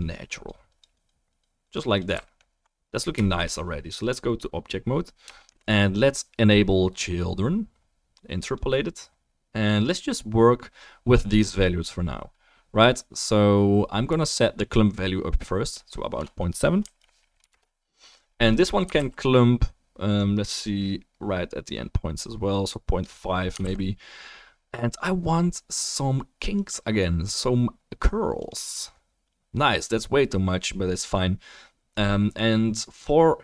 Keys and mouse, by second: 2.2 alt+click, 2.2 alt+middle click, 2.2 alt+right click, 3.2 shift+drag, 3.2 shift+middle drag, 3.2 shift+right drag, 8.6-15.7 drag, 19.0 ctrl+s, 23.6 ctrl+s.